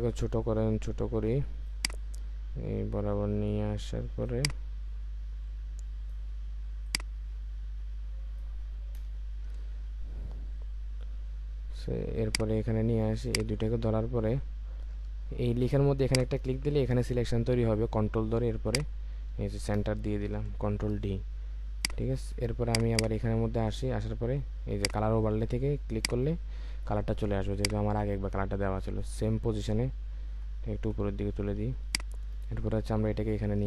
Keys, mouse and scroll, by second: 9.0 Return, 13.3 ctrl+click, 16.1 ctrl+click, 20.2 ctrl+d, 22.9 double click, 30.3 Up, 30.8 Up, 31.9 alt+click.